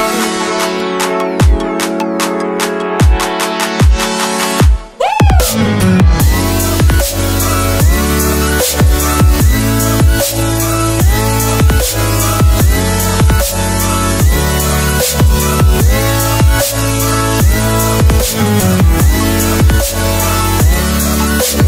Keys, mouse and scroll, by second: 0.3 right click, 1.1 click, 1.3 scroll up 1, 2.2 click, 11.7 click, 15.1 s, 16.3 click, 19.3 b, 20.4 click.